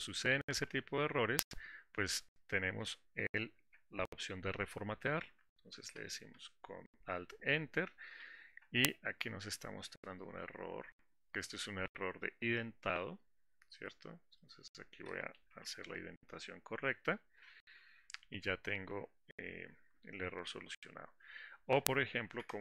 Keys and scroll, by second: 7.0 alt+Return, 16.2 Tab.